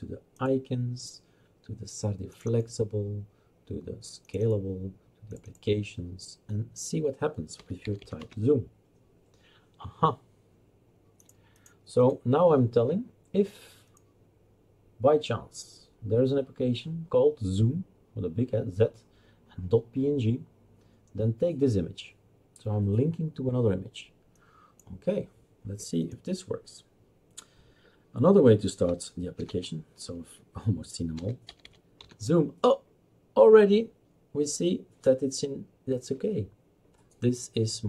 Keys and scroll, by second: 7.3-8.7 typing, 29.4 alt+F3, 30.9-32.5 typing.